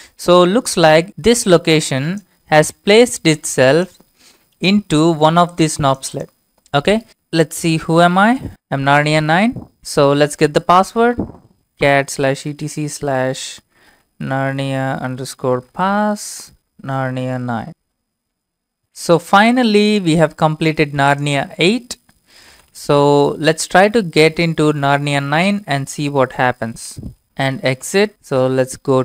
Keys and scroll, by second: 4.5 alt+Tab, 7.3-9.0 typing, 10.2-10.9 typing, 12.1-18.3 typing, 18.8 ctrl+c, 19.9 alt+Tab, 22.2-24.3 typing, 25.6 typing, 26.9 ctrl+v, 27.0-28.4 typing, 28.6 Left.